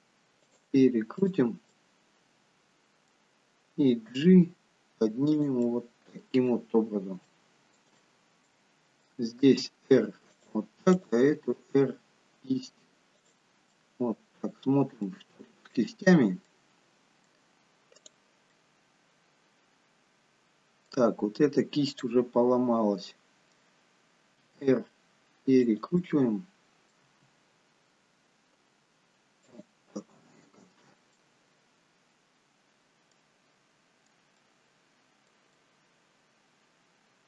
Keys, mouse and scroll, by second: 0.3 r, 1.3 click, 1.9 middle click, 4.2 g, 5.8 middle click, 6.9-7.4 scroll up 3, 7.4 shift+middle click, 8.1 middle click, 9.6 r, 11.0 click, 11.5 r, 13.8 middle click, 15.2 middle click, 16.3 scroll down 1, 16.6 middle click, 18.1 click, 18.7 middle click, 22.0 click, 24.5 r, 26.1 middle click, 27.3 r, 30.1 middle click, 33.2 middle click, 34.6 middle click, 35.8 middle click.